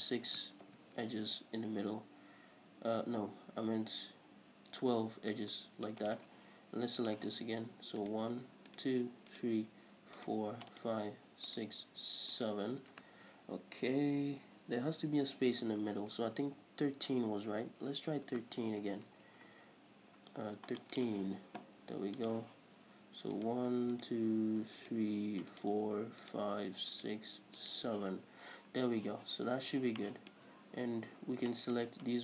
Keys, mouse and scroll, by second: 0.8 ctrl+r, 6.3 click, 6.5 right click, 8.2 right click, 8.9 shift+right click, 9.5 shift+right click, 10.4 shift+right click, 10.9 shift+right click, 11.7 shift+right click, 12.5 shift+right click, 16.4 ctrl+z, 18.9 ctrl+r, 21.2 click, 21.3 right click, 22.5 click, 23.6 right click, 24.1 shift+right click, 25.0 shift+right click, 25.7 shift+right click, 26.4 shift+right click, 27.1 shift+right click, 27.8 shift+right click, 28.5-29.7 scroll down 1, 29.7 scroll up 1, 30.2-31.8 shift+middle drag, 30.7-31.2 scroll up 1, 31.8 shift+right click.